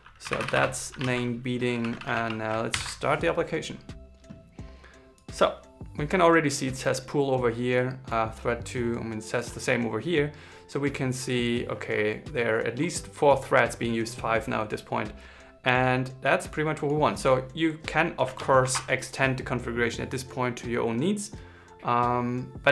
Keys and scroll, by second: 1.7 super+s, 2.4 ctrl+shift+r.